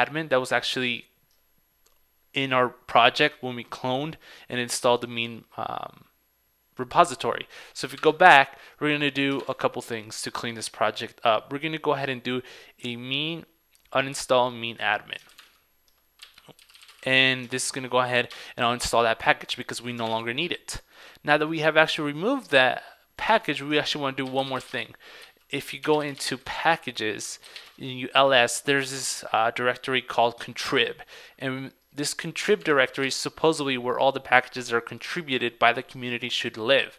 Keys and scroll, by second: 8.1 super+Tab, 15.4 ctrl+super+c, 15.5 super+Tab, 17.6 super+v, 20.2 super+Tab, 23.4 super+Tab, 32.7 super+Tab.